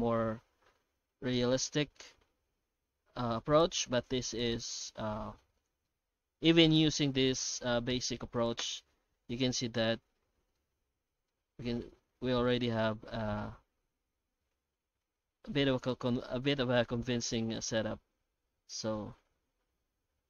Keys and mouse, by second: 0.0-3.3 drag, 3.5 shift+drag, 4.5 click, 5.5-5.8 drag, 8.4-9.9 drag, 10.5-11.3 middle drag, 11.9-12.9 middle drag, 13.3-15.9 middle drag, 16.2 shift+middle click, 17.5 middle click, 19.0-20.2 drag.